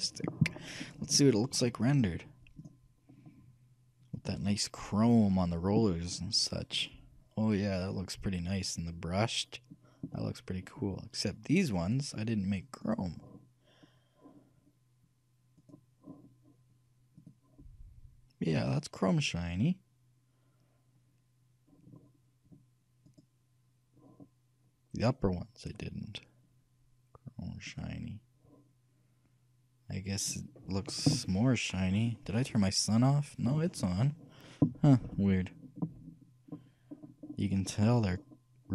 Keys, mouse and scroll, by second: 2.7-4.7 drag, 6.5-10.9 middle drag, 12.1-15.0 right drag, 15.8-17.6 right drag, 17.4-19.1 drag, 23.3-25.9 right drag, 25.9-27.7 drag, 35.2-36.9 middle drag, 37.1-38.2 middle drag.